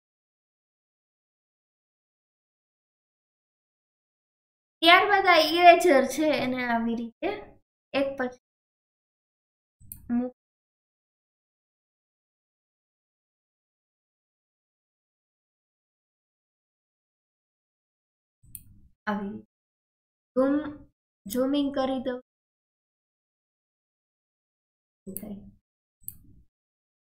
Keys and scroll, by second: 0.2-3.5 typing.